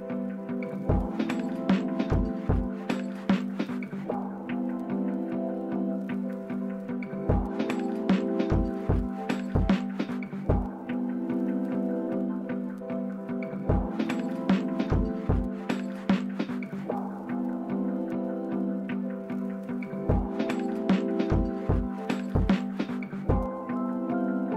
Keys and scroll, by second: 13.4 typing.